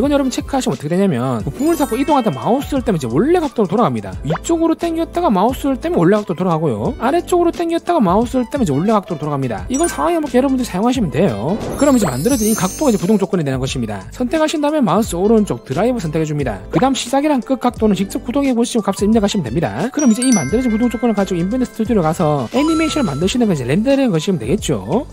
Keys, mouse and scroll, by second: 1.1 click, 2.0-3.2 drag, 4.5-5.9 drag, 7.1-8.7 drag, 14.5 click, 15.0 right click, 20.1 click, 21.5 click, 23.4 click.